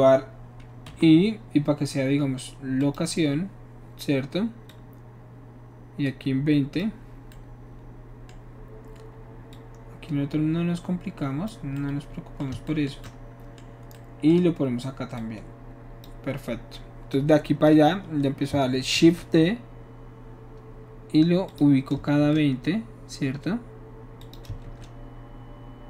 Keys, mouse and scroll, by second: 0.8 i, 2.8 click, 4.7-6.8 drag, 9.5-11.5 drag, 11.7-15.2 middle drag, 15.2 shift+click, 17.1-17.7 drag, 18.9 shift+d, 21.5 click, 22.1 shift+d, 24.2 click, 24.6 shift+d.